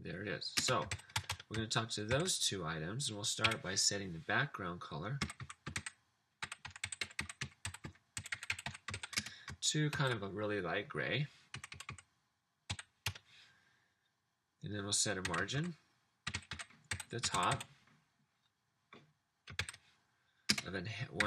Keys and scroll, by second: 0.5-2.9 typing, 3.6 Up, 5.0-9.9 typing, 11.6-12.7 typing, 13.0 Return, 15.0-18.0 typing, 19.7-21.2 typing.